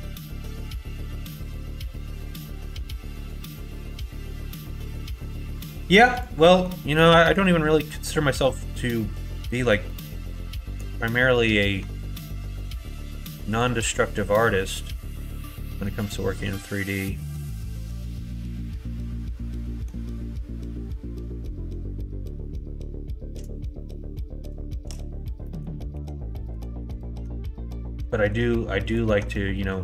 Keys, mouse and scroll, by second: 2.4 middle click, 2.9 middle click, 3.2 middle click, 3.5 shift+middle click, 4.6 middle click, 6.1 click, 6.4 middle click, 8.2 middle click, 8.9 middle click, 9.8 middle click, 10.7 h, 11.8 Tab, 12.5 middle click, 13.5 alt+click, 14.0-15.8 middle drag, 16.0-17.2 middle drag, 18.1-19.8 middle drag, 25.4 middle click, 25.9 3, 26.9 alt+click, 28.1 middle click, 29.5 middle click.